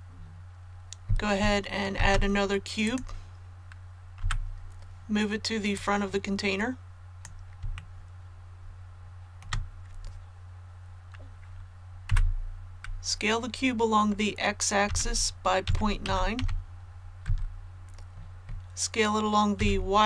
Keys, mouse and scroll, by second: 1.9 shift+a, 2.9 click, 4.2 KP_3, 5.7-7.5 drag, 7.7 shift+middle click, 12.1 KP_1, 14.9 s, 15.6 x, 16.0 KP_Decimal, 16.4 KP_9, 19.6 s.